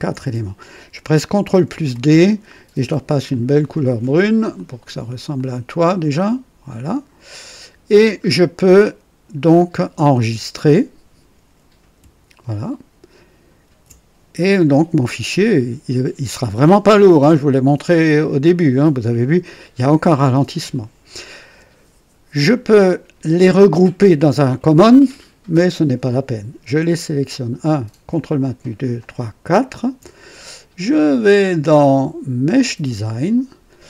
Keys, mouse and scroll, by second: 1.9 ctrl+d, 3.2 click, 4.5 click, 5.3 click, 6.0 click, 6.8 click, 7.8-8.2 scroll down 1, 8.6 click, 13.6 ctrl+s, 26.8 click, 28.1 ctrl+click, 28.9 ctrl+click, 29.5 ctrl+click, 30.9 click, 32.5 click.